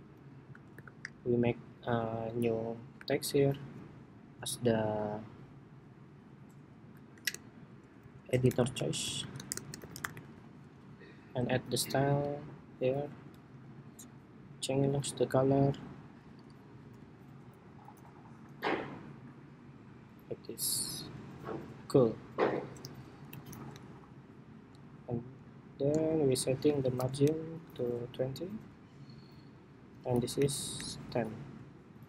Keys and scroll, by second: 0.4 shift+super+y, 10.4 Escape, 23.4 alt+Up, 26.9 alt+shift+Down, 28.0 alt+shift+Down, 30.1 alt+Up, 30.5 alt+Up, 31.3 alt+Up.